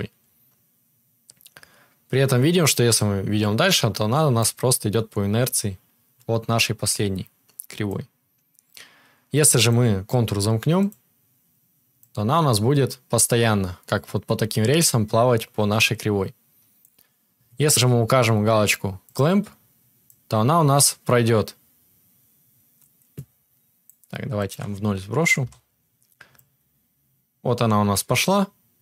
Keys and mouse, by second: 10.8-12.5 drag, 12.0 right click, 12.5-19.1 middle drag, 14.4-19.1 drag, 14.4-20.1 right drag, 20.1-28.8 middle drag.